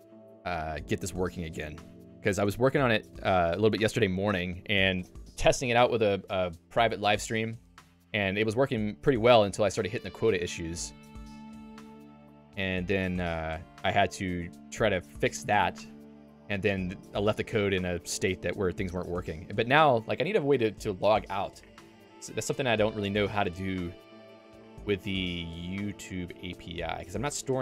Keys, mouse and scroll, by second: 1.8 d, 2.3 ctrl+s, 2.8 Escape, 14.4 Escape, 24.3 click.